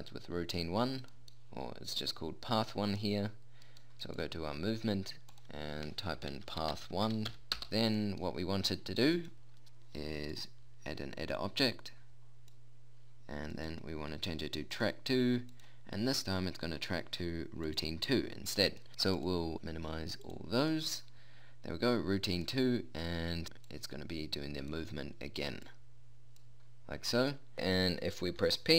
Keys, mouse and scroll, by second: 4.2-6.5 right drag, 7.7-17.8 drag, 19.6-24.0 drag.